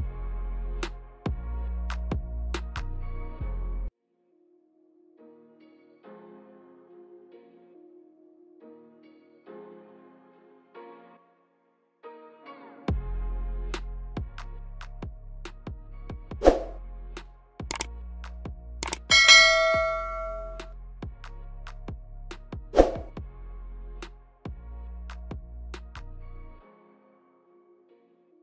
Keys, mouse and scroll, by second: 15.0 click, 16.0-16.5 scroll down 3, 16.4 middle click, 17.0 scroll up 3, 17.4 shift+middle click, 17.9 scroll up 2, 18.4 middle click, 19.4-19.7 scroll down 2, 20.3 middle click, 21.0 shift+middle click, 22.1 scroll down 2, 22.7 middle click, 22.7 scroll down 1.